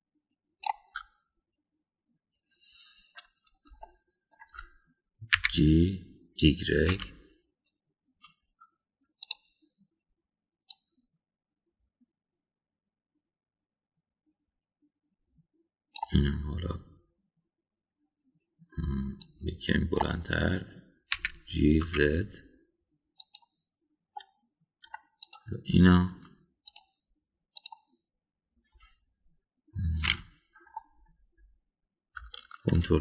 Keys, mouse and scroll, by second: 0.4-1.7 shift+drag, 4.8-5.4 shift+middle drag, 6.3 g, 11.7-17.1 drag, 20.2 click, 22.2 g, 25.1 middle click, 26.2 click, 27.7 click, 31.1 middle click.